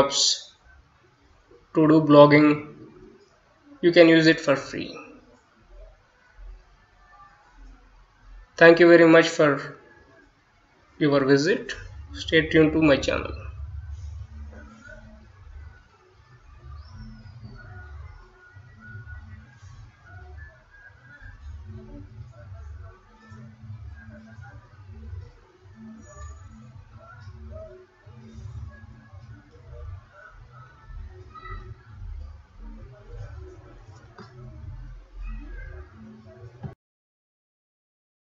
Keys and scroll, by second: 6.9-11.8 typing, 16.0-22.9 typing, 24.9-28.8 typing, 34.3 ctrl+s.